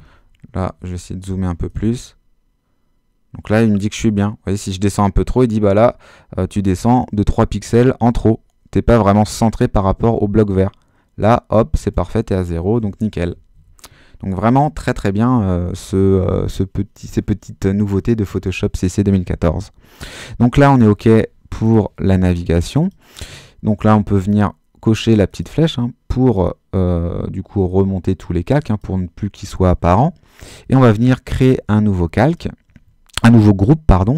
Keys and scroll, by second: 12.7 shift+super+-.